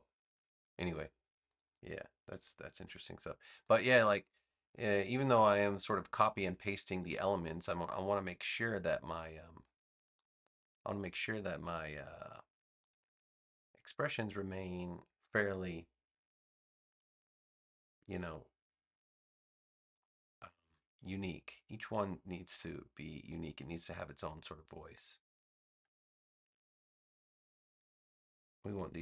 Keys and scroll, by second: 2.8 a.